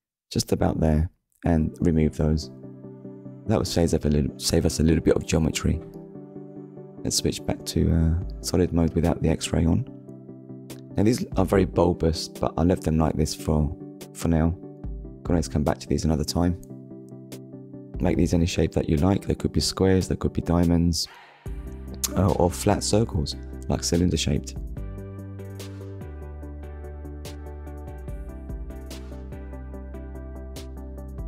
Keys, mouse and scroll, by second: 1.4 Delete, 2.3 click, 4.0 Tab, 6.4 click, 7.1 middle click, 8.2 scroll down 1, 8.8 middle click, 10.3 middle click, 11.3-11.7 scroll down 2, 11.8 shift+middle click, 12.7 click, 13.6 click, 14.4-14.8 scroll down 1, 16.1 click, 17.4 shift+s, 17.7 t, 18.2 d, 18.9 Return, 19.9 scroll down 1, 21.7 ctrl+s, 23.5 KP_1, 24.7 scroll up 1, 25.4 shift+middle click, 27.4 scroll up 1, 28.1 scroll up 1, 30.2 click.